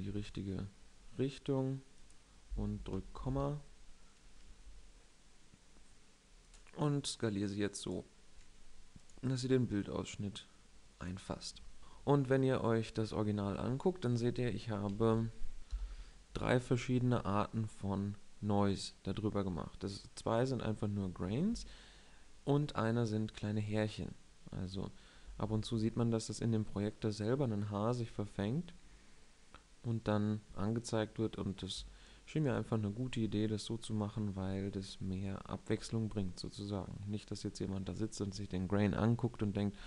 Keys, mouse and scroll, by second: 0.0 s, 2.0 click, 2.9 ,, 4.6 s, 7.2-8.9 drag, 8.3 s, 9.8 click, 29.2-32.2 middle drag, 32.3-34.2 middle drag.